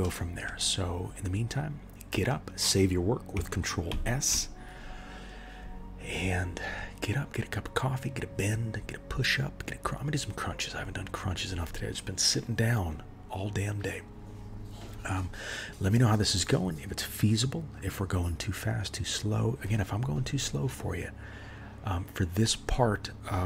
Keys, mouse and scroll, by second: 0.0 shift+middle click, 3.9 ctrl+s.